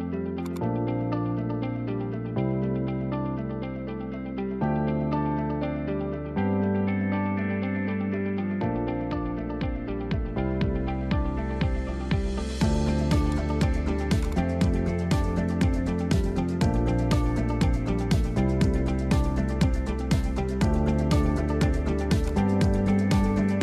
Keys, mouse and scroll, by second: 0.4 click, 2.1 click, 2.6-3.4 scroll up 5, 3.0 Tab, 3.5 s, 4.9 s, 9.4 Tab, 9.6-10.0 scroll up 1, 10.0 alt+z, 10.5 `, 12.0 scroll up 1, 12.6 shift+d, 14.2 click, 15.1 n, 16.5 s, 18.9 s, 21.0 alt+z, 21.5 h, 21.9 middle drag, 22.2 click, 23.0 Tab.